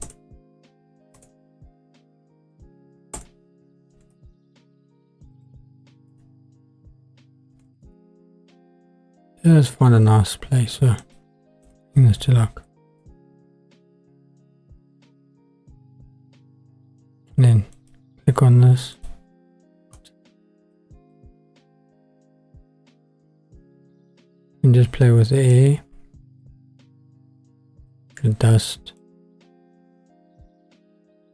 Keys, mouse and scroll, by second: 2.5-4.2 drag, 5.3-8.0 drag, 7.7 KP_0, 11.0-13.2 drag, 12.4 KP_0, 17.7-19.2 drag, 20.0 shift+click, 21.1-25.5 drag, 26.4-28.9 drag, 29.0-31.3 drag.